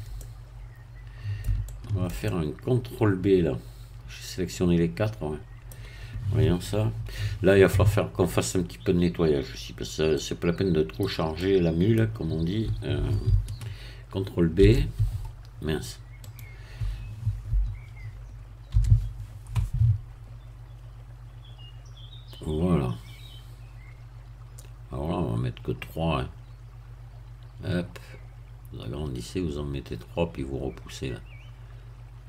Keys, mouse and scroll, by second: 0.2-5.9 shift+middle drag, 10.1-12.4 middle drag, 14.6 shift+b, 16.3-17.5 right drag, 18.7 ctrl+b, 24.8-25.2 scroll down 2, 26.1 scroll down 2, 26.9-28.1 scroll down 2, 29.3 scroll up 2.